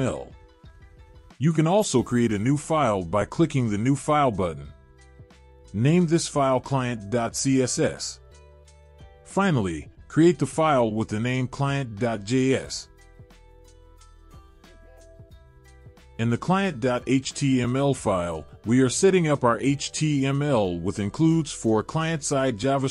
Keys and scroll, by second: 0.0-1.5 typing, 1.7 Return, 6.9-9.6 typing, 13.0-15.6 typing, 20.0 ctrl+v.